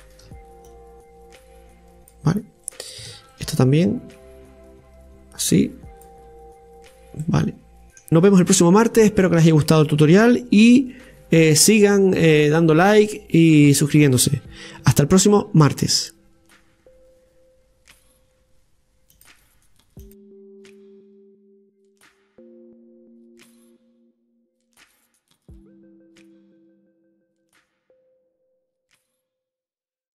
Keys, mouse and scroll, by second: 0.7-2.7 drag, 2.7 right click, 3.8-6.8 drag, 7.2 middle click, 19.1-30.1 drag.